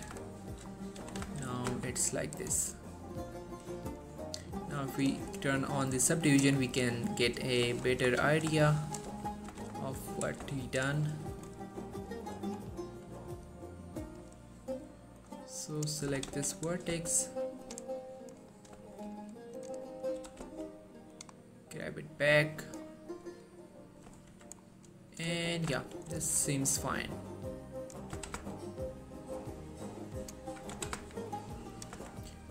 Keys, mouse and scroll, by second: 0.0 click, 0.8 middle click, 1.1-1.8 typing, 2.5 click, 2.7 scroll down 1, 2.8-4.4 middle drag, 5.0 click, 5.4 middle click, 5.8 scroll up 1, 6.1 click, 6.7-7.6 middle click, 8.0 scroll up 1, 8.2 middle click, 9.0 shift+click, 9.3 shift+middle click, 9.6 g, 9.8 y, 10.5 x, 11.1 click, 11.8 middle click, 12.8 scroll up 1, 13.0-14.5 middle drag, 15.3 click, 16.2 g, 16.4 y, 17.0 x, 17.8 click, 18.0 scroll down 1, 18.1-18.9 middle click, 19.7 click, 19.9 middle click, 20.3 g, 20.5 x, 21.2 click, 21.5-21.8 scroll down 1, 21.8-24.3 middle drag, 24.4 1, 24.8 scroll down 1, 25.5 shift+middle click, 26.2 ctrl+r, 26.6 click, 28.3 typing, 30.3 click, 30.8 typing, 31.8 click, 32.1 Tab, 32.3 scroll down 1, 32.4-32.5 middle click.